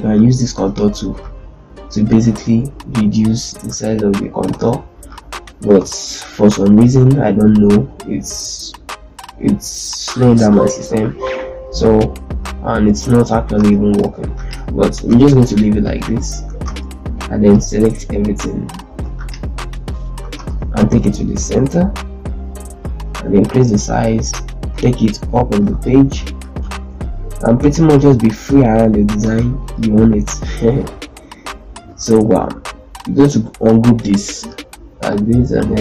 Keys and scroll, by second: 4.4 ctrl+space, 5.6 ctrl+space, 6.9 ctrl+z, 13.4 ctrl+space, 14.0 z, 16.4 ctrl+space, 18.8 ctrl+z, 20.1 ctrl+space, 20.8 ctrl+shift+c, 24.5 shift+Page_Up, 25.6 shift+c, 26.5 shift+z, 29.1 ctrl+space.